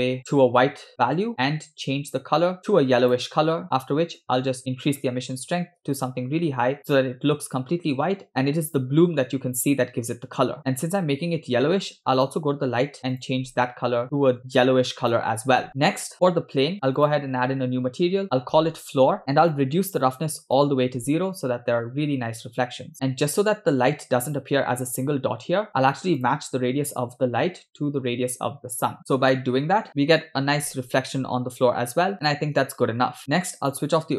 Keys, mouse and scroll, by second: 4.3 click, 6.8 scroll up 2, 12.1 click, 13.1 click, 16.3 click, 17.0 click, 18.7 shift+click, 19.2 scroll down 2, 19.2 o, 19.7 click, 23.0-25.2 scroll up 3, 25.7-26.1 scroll down 2, 26.2 click, 28.0 shift+click, 29.9 click, 33.2 scroll down 2, 33.8 click.